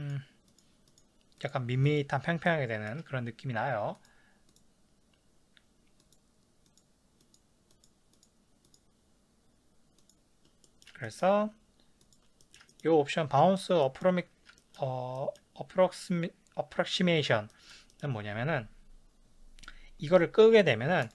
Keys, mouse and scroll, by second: 0.0 click, 0.5 click, 0.9 click, 1.4 click, 1.9 click, 2.5-4.0 shift+middle drag, 4.0 click, 4.5 click, 6.0 click, 6.7 click, 7.3 click, 7.8 click, 8.2 click, 8.7 click, 10.0 click, 10.6-12.1 shift+middle drag, 12.1 click, 12.4-20.6 ctrl+shift+middle drag, 20.6-21.1 drag.